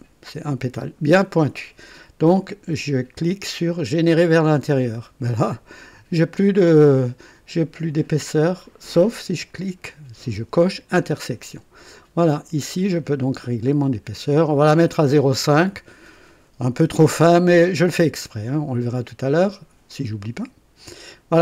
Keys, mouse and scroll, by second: 4.1 click, 10.6 click, 12.4-13.2 scroll down 1, 14.0 scroll down 1, 17.9-19.5 drag.